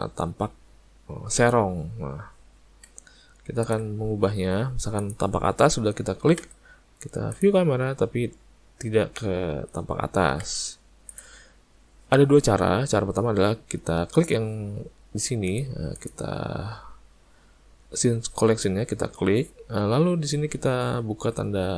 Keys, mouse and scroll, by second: 1.4 click, 5.0 click, 15.5 click, 16.0 click.